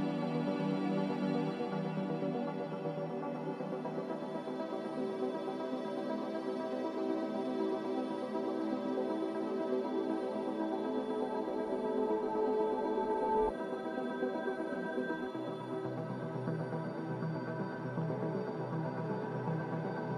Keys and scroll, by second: 14.4 1, 17.1 ctrl+j.